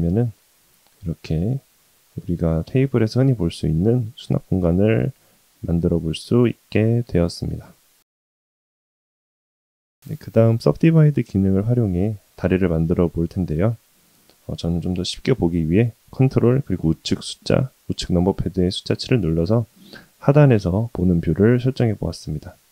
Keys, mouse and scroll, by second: 3.5-9.0 middle drag, 9.1-10.1 middle drag, 10.4 middle click, 11.6 shift+middle click, 13.4 shift+middle click, 17.1 ctrl+KP_7, 21.2 shift+middle click.